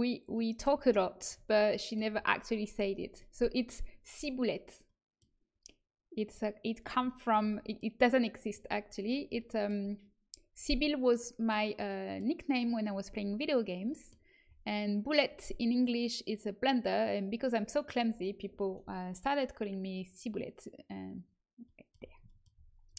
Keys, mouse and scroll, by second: 14.1-18.2 middle drag, 21.2-22.9 middle drag.